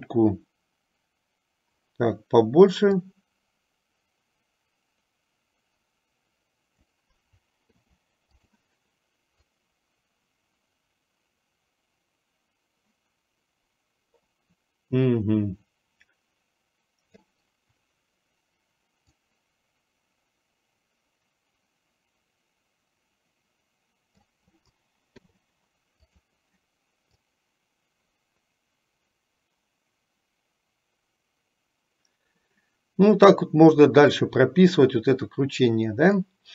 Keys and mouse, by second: 0.0 click, 3.0-7.2 drag, 9.6-17.6 drag, 19.2 click, 19.5-24.4 drag, 27.3-36.5 drag.